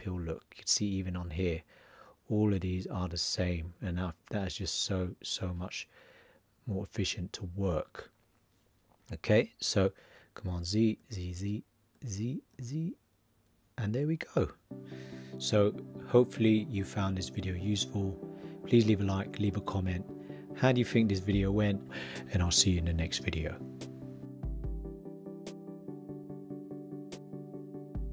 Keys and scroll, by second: 10.4 super+z.